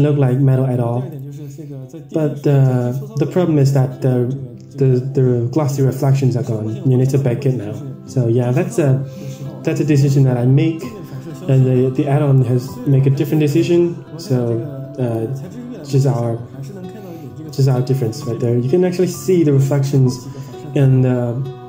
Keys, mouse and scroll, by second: 1.2 click, 1.9 Tab, 3.3-3.7 scroll down 3, 3.7 scroll up 2, 6.4 scroll up 1, 12.9 drag, 15.1 click, 17.6 drag, 18.9 scroll down 4, 19.2-19.5 scroll up 3, 20.0-20.3 scroll up 3, 21.0-21.6 scroll down 2.